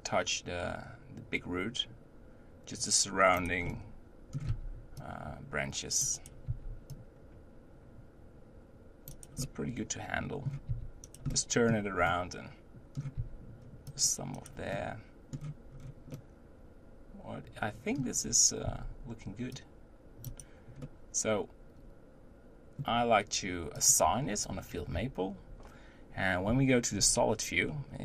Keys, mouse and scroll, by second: 3.6 middle click, 4.3 scroll up 1, 4.5 c, 6.5 c, 9.4-10.7 middle drag, 10.7 c, 11.3-13.1 middle drag, 13.1 c, 14.7-15.8 middle drag, 15.8-16.1 scroll down 1, 16.1-18.2 middle drag, 18.2-18.6 scroll up 2, 18.6 c, 20.8-23.7 middle drag, 23.7 click, 25.8 Tab, 26.4 z, 27.7-28.0 middle drag.